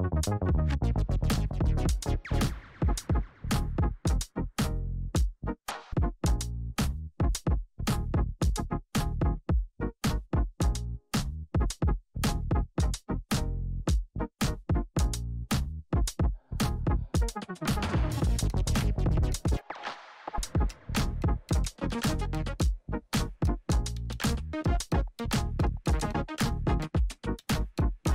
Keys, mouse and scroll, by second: 5.4-6.3 scroll up 1, 6.3 click, 7.3 Return, 9.2 ctrl+z, 12.6 click, 13.5 u, 16.9 click, 18.6 ctrl+0, 20.3-22.5 drag, 22.5 s, 23.1-26.8 drag, 27.3 click.